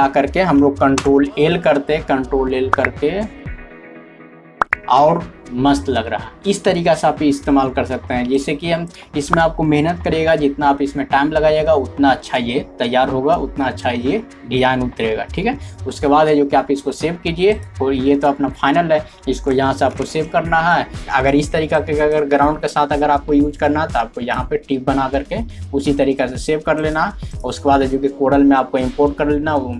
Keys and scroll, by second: 1.0 ctrl+l, 20.0 alt+e.